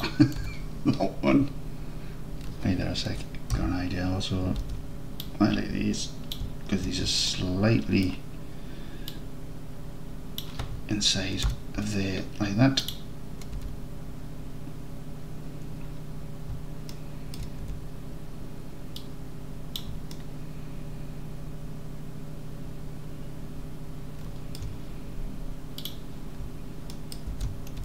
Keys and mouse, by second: 0.0 click, 0.5 Tab, 4.5 h, 4.6 alt+z, 5.2-6.4 drag, 7.3 alt+drag, 7.9 alt+click, 9.2-10.4 drag, 11.5 alt+h, 12.8 click, 13.7 Tab, 17.0 alt+click, 17.7 Tab, 19.0-19.8 drag, 20.2-24.6 alt+drag, 27.0 alt+click, 27.3 alt+z.